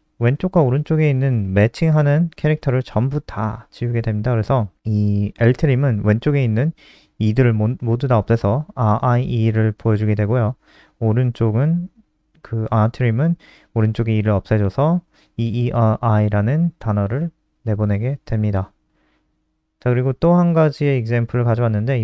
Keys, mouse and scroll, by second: 7.3 ctrl+s, 7.6 F5, 12.5 click, 17.3 scroll down 2, 19.7 ctrl+c, 19.9 click, 20.6 ctrl+c, 20.6 click, 21.2 ctrl+v.